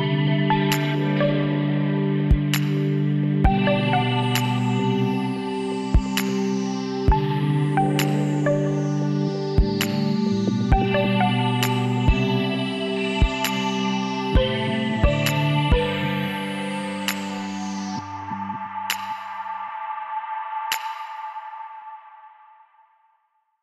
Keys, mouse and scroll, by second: 0.0 s, 3.4 Tab, 3.7-5.4 middle drag, 5.4 KP_1, 6.6 z, 8.4 middle click, 8.6 middle click, 12.3-13.6 middle drag, 13.6 KP_3, 14.0 middle click, 15.6 middle click, 16.8 KP_Divide, 18.2 middle click, 20.0-23.2 middle drag, 21.9 Tab, 23.2 z.